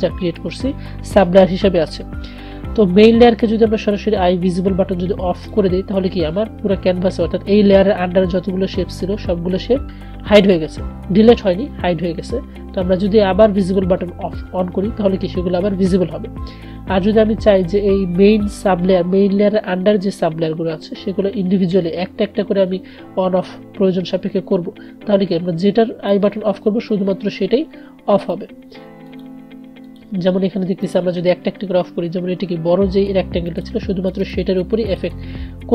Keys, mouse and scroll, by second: 13.7 click, 13.7 click, 17.7 click, 26.3 click, 33.6 click.